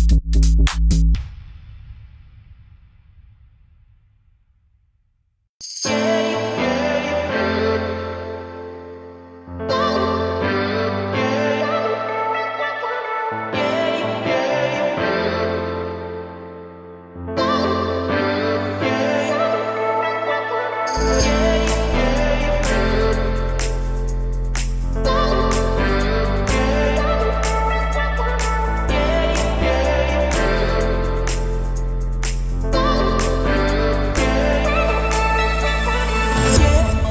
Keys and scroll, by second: 1.9 Return, 2.9 Escape, 10.2 Return, 15.4 Return, 16.6 Escape, 20.5 Return, 23.1 3, 23.7 Return, 30.4 Return.